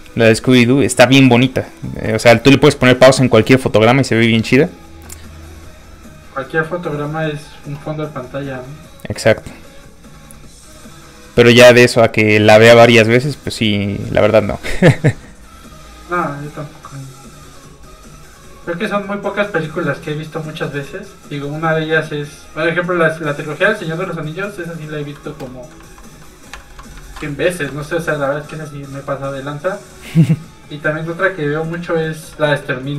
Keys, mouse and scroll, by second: 25.4 middle click, 25.8 alt+a, 26.3 middle click, 26.6 shift+middle click, 26.7 middle click, 27.0 ctrl+s, 27.3 middle click, 28.0 middle click, 28.9 middle click, 28.9 z, 29.2 z, 29.7 middle click, 32.4 shift+middle click.